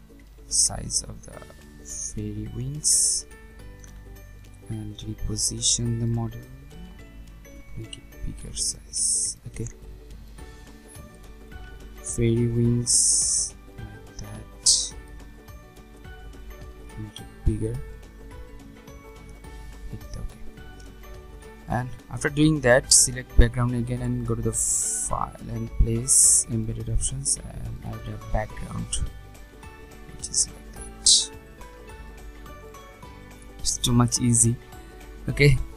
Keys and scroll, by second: 6.7 ctrl+t.